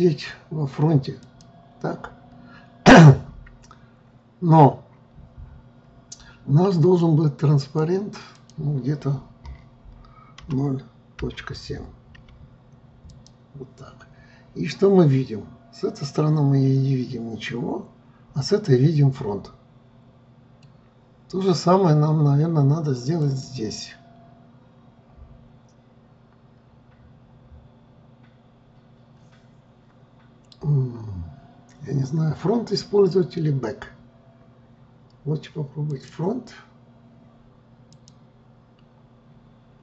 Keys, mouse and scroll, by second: 1.4-4.4 drag, 7.7-14.9 drag, 14.9-18.0 middle drag, 23.3-26.3 drag, 36.0-39.8 drag.